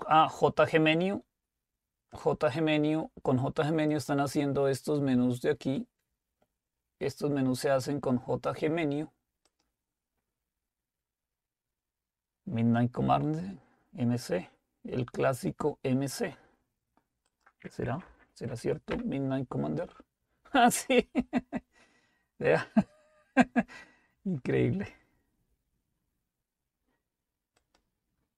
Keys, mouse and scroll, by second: 1.0-3.7 drag, 4.4 click, 9.5 click, 17.3 click, 18.1-18.5 typing, 18.9 Return, 27.6 click.